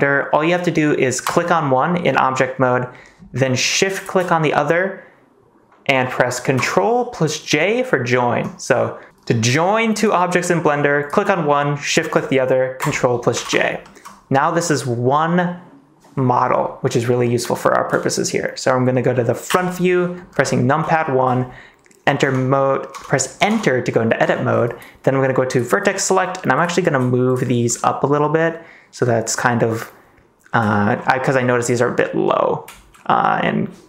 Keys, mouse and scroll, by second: 1.2 click, 3.9 shift+click, 10.4 middle click, 10.6 click, 11.9 shift+click, 13.3 ctrl+j, 13.8 middle click, 14.6 middle click, 17.5 middle click, 19.4 KP_1, 20.9 shift+middle click, 22.1 Tab, 22.9 Tab, 23.4 Tab, 24.3 shift+middle click, 25.5 click, 30.7 shift+middle click, 31.2 middle click.